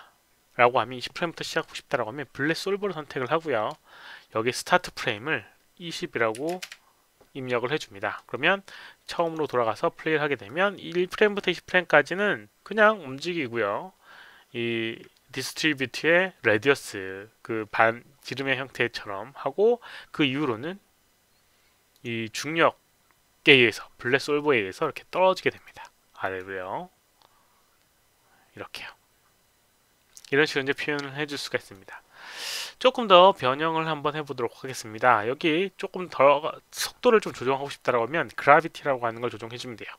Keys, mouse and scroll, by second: 4.7 click, 6.3 KP_2, 6.4 KP_0, 9.0 click, 9.2 click, 9.4 click, 10.4-17.7 drag, 21.9 click, 25.5 click, 26.2 click, 30.1 click, 31.5 click.